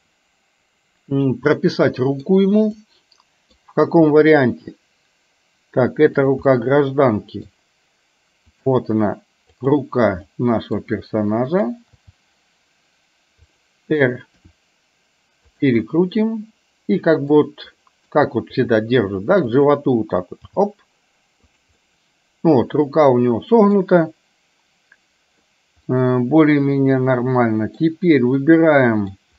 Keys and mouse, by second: 2.8 middle click, 4.2 g, 6.6-7.6 middle drag, 8.6 click, 9.6 click, 10.3 middle click, 11.3 middle click, 12.0 g, 14.5 r, 15.8-17.5 middle drag, 17.8 middle click, 18.6 r, 20.6 g, 21.7-23.8 middle drag, 26.0-27.8 middle drag, 28.5 middle click.